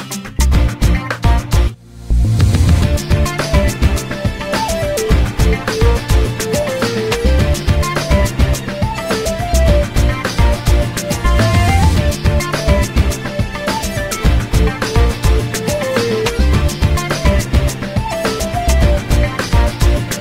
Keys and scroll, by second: 0.5 8, 0.7 0, 3.2 BackSpace, 4.1 shift+4, 5.1 2, 6.6 Return, 9.7 m, 15.4 p, 19.5 ctrl+x.